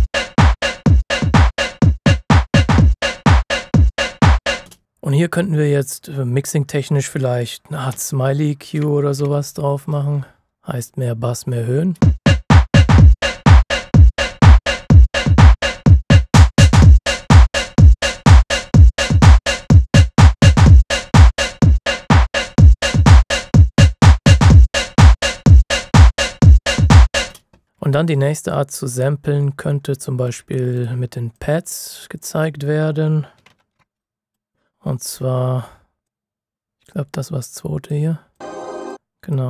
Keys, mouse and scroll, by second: 0.2 typing, 4.6 space, 5.4 click, 7.9-9.1 typing, 10.5 click, 11.9 space, 12.2 click, 27.2 space, 27.6 scroll up 1, 27.8 ctrl+shift+scroll down 1, 28.8-29.3 ctrl+shift+scroll up 1, 29.3-29.7 ctrl+shift+scroll down 1, 29.7 ctrl+shift+scroll up 1, 30.3-30.7 shift+scroll up 1, 30.7 click, 33.1-34.3 typing, 34.0 click, 36.0 click.